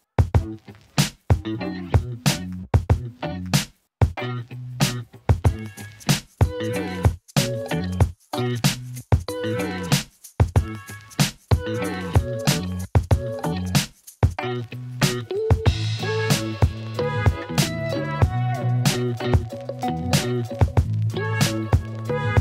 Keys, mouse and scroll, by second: 1.7 click, 2.2-3.3 alt+middle drag, 3.3 alt+click, 3.6 g, 3.7 y, 5.1-6.1 alt+middle drag, 6.1 y, 6.9 alt+middle drag, 7.1 alt+click, 7.3 alt+middle click, 7.3 alt+drag, 7.6 alt+middle drag, 7.7-8.4 alt+drag, 8.6-9.4 alt+middle drag, 9.9 g, 10.4 z, 11.3 ctrl+alt+middle click, 12.5 click, 13.3 alt+middle drag, 13.4-13.8 alt+drag, 14.1 click, 14.7-15.2 alt+middle drag, 15.2 ctrl+alt+click, 15.4 Tab, 17.5 ctrl+z, 18.1 ctrl+b, 21.9 click, 22.2 Tab.